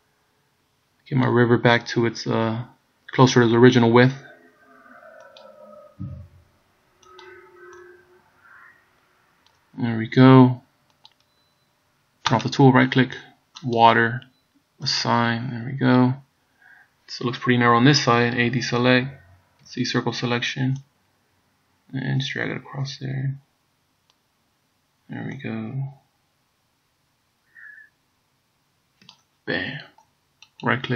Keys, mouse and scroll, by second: 12.5 right click, 13.8 click, 14.9 click, 15.8 scroll down 2, 18.5 a, 19.7 c, 30.7 right click.